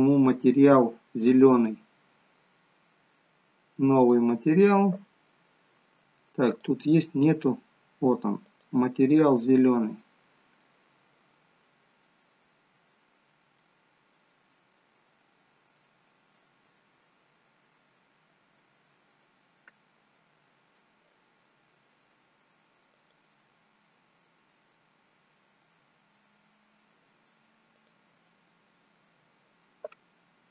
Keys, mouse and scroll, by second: 0.4-1.4 scroll up 5, 1.4 click, 3.9 click, 12.3 middle click, 12.3-14.6 scroll down 2, 14.6 middle click, 15.0-15.7 scroll down 2, 15.7 middle click, 17.6-18.1 scroll up 3, 18.1-18.7 scroll down 1, 18.9-19.7 scroll down 2, 22.9 click.